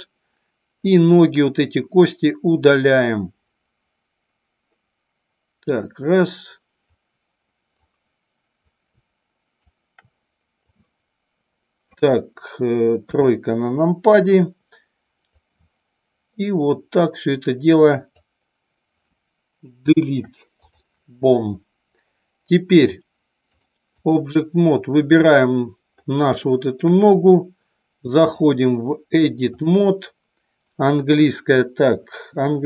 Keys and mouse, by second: 1.0-5.5 drag, 7.7-9.7 drag, 10.7-11.8 drag, 13.0 KP_3, 15.3-18.2 drag, 19.9 Delete, 23.4 click, 25.1 click, 26.3-26.8 shift+middle drag, 28.3-29.7 drag.